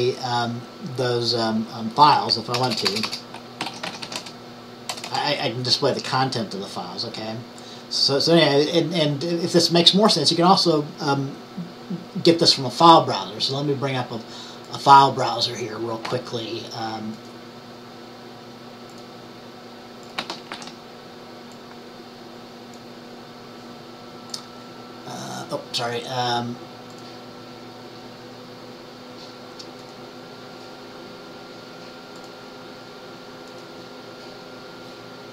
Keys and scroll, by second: 2.2 Up, 2.6-4.5 typing, 20.6 ctrl+t.